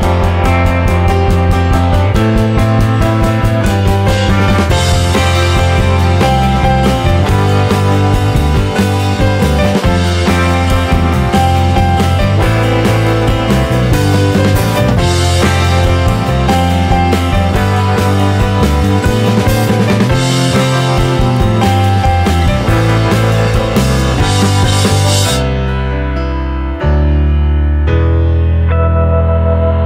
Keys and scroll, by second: 12.2-14.4 typing, 16.9 Delete, 27.4 Delete, 29.7 Delete.